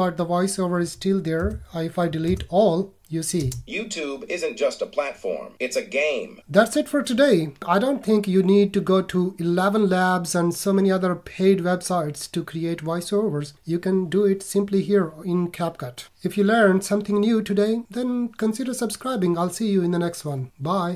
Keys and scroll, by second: 1.5 BackSpace.